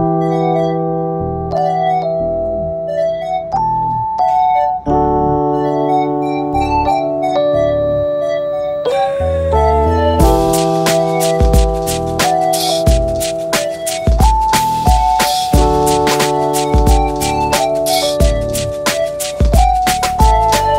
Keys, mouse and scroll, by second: 0.0 ctrl+Tab, 0.9 ctrl+1, 2.9 click, 3.4 drag, 3.8-4.3 drag, 4.3 middle click, 4.5 alt+click, 5.7-6.1 alt+drag, 6.5 alt+click, 7.1-8.4 middle drag, 9.8-14.3 middle drag, 15.9-17.3 drag, 17.9 click, 18.8 middle click, 19.7 middle click.